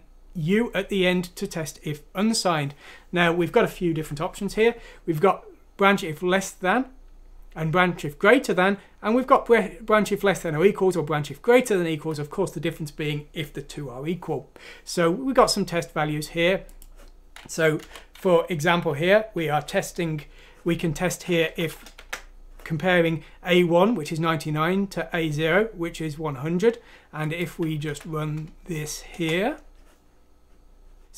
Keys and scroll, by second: 17.8 Home, 19.6 ;, 21.5-22.9 typing, 27.9 F6, 29.1 Return.